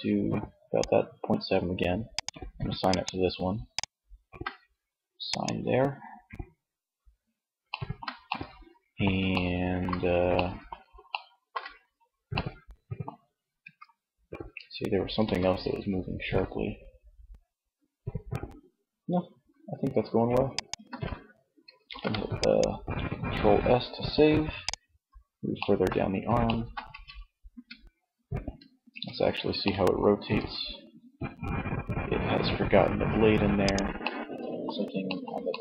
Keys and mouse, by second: 6.1-7.4 middle drag, 8.1 middle click, 12.6 Tab, 14.2 r, 19.9 click, 20.2 ctrl+z, 21.0 ctrl+s, 26.0 Tab, 26.6 a, 28.0 Tab, 29.2 r, 33.2 click, 34.4 click.